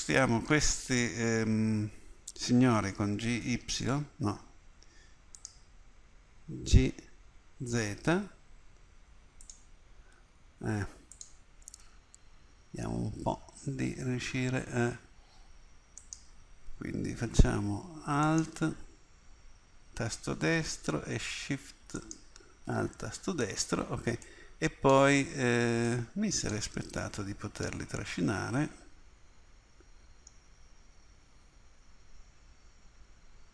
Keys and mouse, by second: 3.1 g, 6.7 g, 11.2 click, 24.3-29.1 middle drag, 33.0 g.